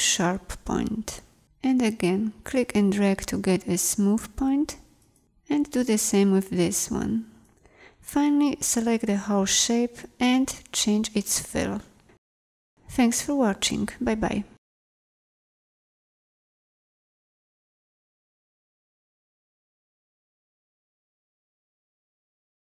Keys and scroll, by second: 8.5 v, 15.2 space, 17.0 space, 17.6 space, 20.3 p, 21.0 p.